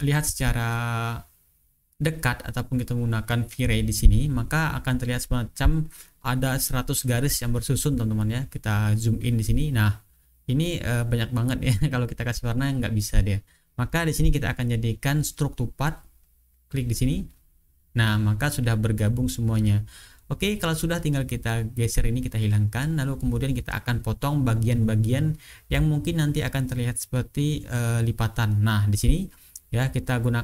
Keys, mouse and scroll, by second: 3.7 click, 4.9 click, 5.7 click, 7.3 click, 8.1-8.7 ctrl+scroll up 1, 9.2-9.6 ctrl+scroll up 2, 11.7 ctrl+scroll down 2, 14.7 click, 16.5 click, 18.3-18.9 ctrl+scroll down 2, 19.3-20.1 ctrl+scroll down 1, 20.4-22.3 drag, 22.6 click, 23.1 click, 25.2 click, 26.7 ctrl+click, 27.2-28.0 ctrl+scroll up 2, 29.7 ctrl+scroll down 2.